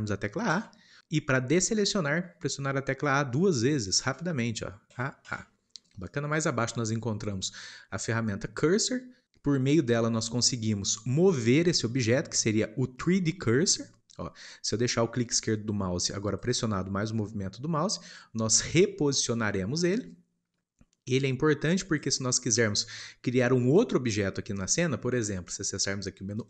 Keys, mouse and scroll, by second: 0.5 a, 5.8 ctrl+Left, 10.3-12.2 drag, 14.4-19.3 drag.